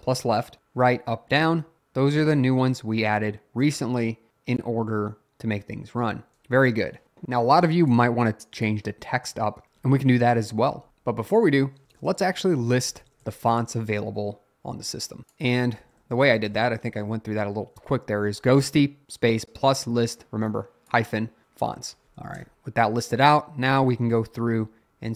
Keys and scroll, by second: 10.7 Up, 10.9 Down, 11.0 Up, 11.8-13.9 typing, 15.8-16.9 typing, 17.0 Up, 22.4 Return.